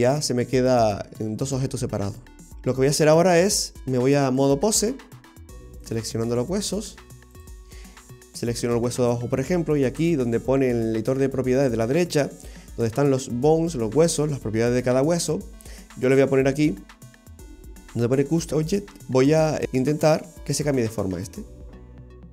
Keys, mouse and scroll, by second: 0.1 click, 1.6-2.4 right click, 2.1 right click, 2.4 scroll down 1, 2.5 middle click, 3.2-3.8 scroll up 4, 4.4 click, 5.9 right click, 6.8 click, 10.3-13.3 scroll down 1, 18.5 click, 21.7 ctrl+z, 21.7 g, 21.9 ctrl+z.